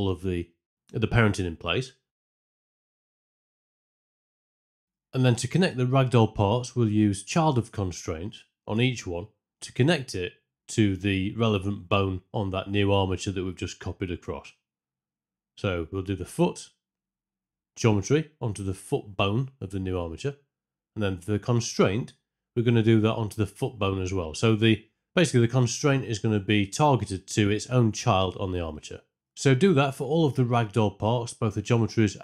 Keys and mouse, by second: 2.7 m, 4.0 click, 8.7 click, 9.2 click, 9.5 click, 10.2-11.3 drag, 13.2 Escape, 13.6-15.7 drag, 16.4-17.6 drag, 23.0 click, 24.3-26.2 drag, 26.6 click, 27.7 click, 28.9 click, 29.2 click, 29.6 click, 31.0 click, 31.3 click, 31.7 click, 31.8 z, 31.8 click.